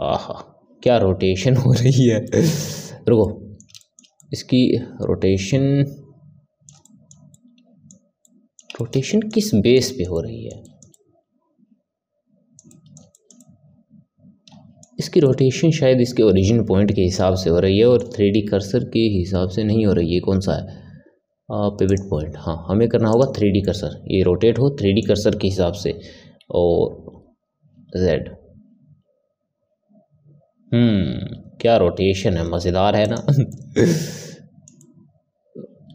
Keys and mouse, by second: 2.2-19.9 middle drag, 21.8-23.6 drag, 23.6-25.9 middle drag, 25.9 r, 33.4-35.9 middle drag.